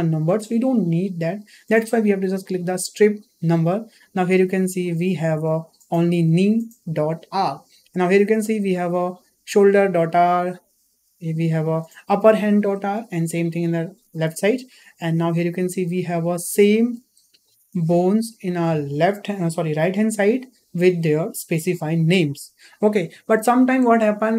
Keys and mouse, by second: 3.3 click, 10.1 click, 13.2 click, 14.1 click, 15.7-16.2 middle drag.